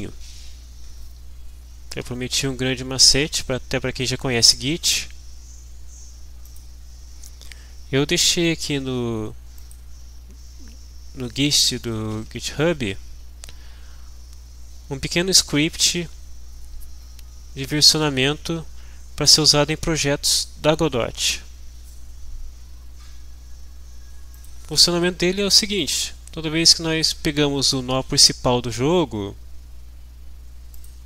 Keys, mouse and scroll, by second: 6.5 click, 9.6 click, 15.3 scroll down 2, 24.3 click, 25.9-26.9 drag, 30.7 click.